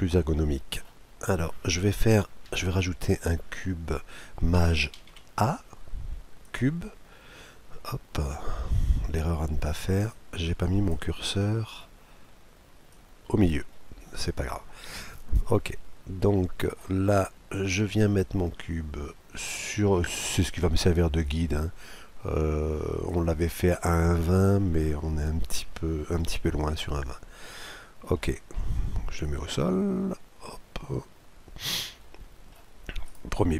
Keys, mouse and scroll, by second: 0.2-2.0 middle drag, 2.1 middle click, 4.9 shift+a, 7.7 middle click, 7.7 scroll down 1, 7.9 middle click, 8.3-9.8 middle drag, 10.1-11.7 drag, 11.1-12.8 middle drag, 12.9-14.6 drag, 13.7-15.4 middle drag, 18.2-19.8 drag, 19.9 click, 21.2-23.1 drag, 23.4-25.3 middle drag, 26.2 KP_Decimal, 27.0-27.6 scroll down 1, 27.6-29.2 middle drag, 29.2-31.0 drag, 31.9-33.5 middle drag, 33.0-33.5 right drag.